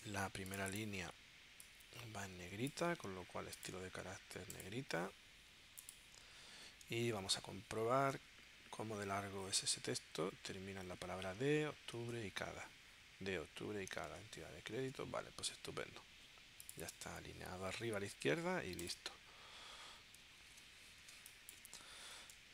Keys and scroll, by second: 14.6 super+Tab, 20.4 super+s, 21.1 space, 22.3 space.